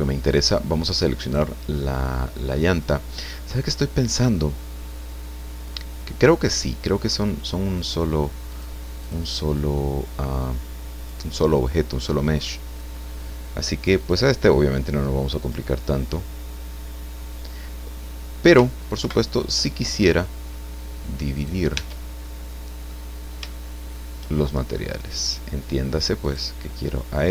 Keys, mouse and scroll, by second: 1.2 right click, 8.5 click, 9.0 click, 10.4 click, 12.1 click, 14.0 click, 15.4 click, 19.0 ctrl+Right, 21.3 right click, 21.7 Tab, 22.2 click, 23.4 shift+scroll up 1, 23.5 shift+middle click, 25.2 click, 26.2 right click.